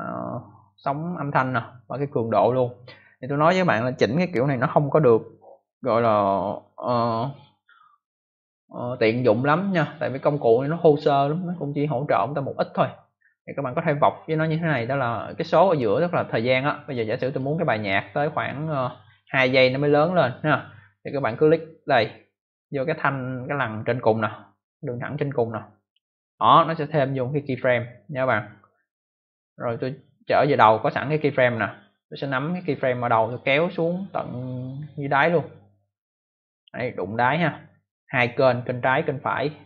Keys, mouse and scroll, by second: 10.6 click, 17.3 click, 25.7 click, 29.1 click, 33.2 click.